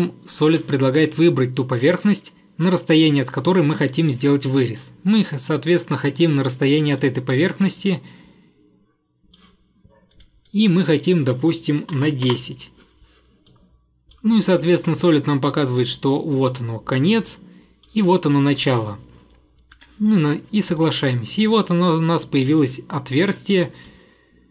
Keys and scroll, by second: 11.7-12.5 typing, 13.5 typing.